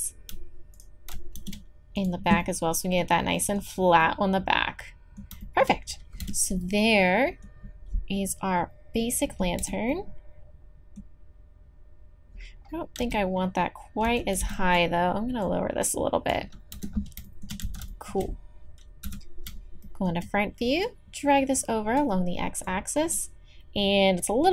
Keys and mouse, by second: 0.7 shift+e, 1.4 shift+e, 6.2 Tab, 9.6 Tab, 13.0 z, 14.1 a, 14.4 b, 15.4-16.9 drag, 16.7 Tab, 17.6 z, 19.0 KP_1, 22.6-24.5 drag.